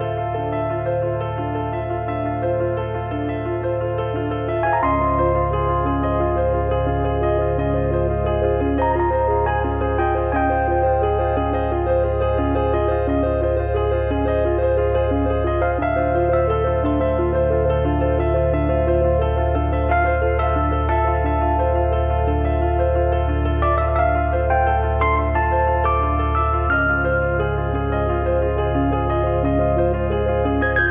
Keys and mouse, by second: 2.4 click, 2.9 e, 4.5 click, 5.5 click, 6.5 click, 9.8 click, 12.1 click, 13.9 shift+b, 16.2 shift+f, 16.9 shift+f, 17.5 middle click, 18.6 click, 21.8 e, 22.4 click, 23.3 click, 24.0 f, 24.4 click, 26.8 click, 28.8 e, 29.6 click, 30.1 click, 30.7 click.